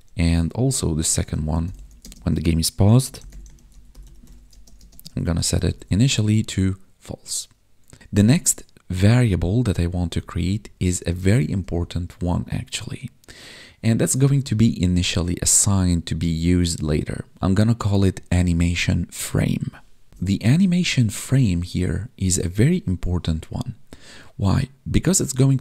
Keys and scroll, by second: 6.6 ctrl+s, 7.6 Down, 9.4 Up, 11.5 Up, 20.1 ctrl+s.